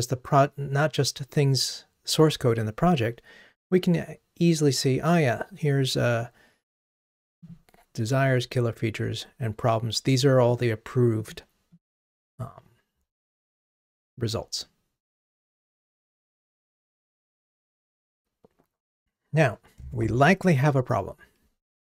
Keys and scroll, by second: 8.2 Down.